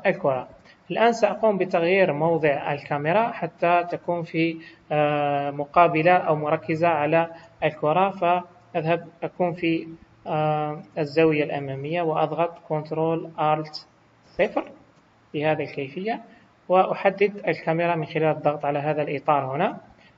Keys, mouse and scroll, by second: 0.5 KP_1, 9.7 shift+middle click, 14.4 ctrl+alt+KP_0, 17.0 click.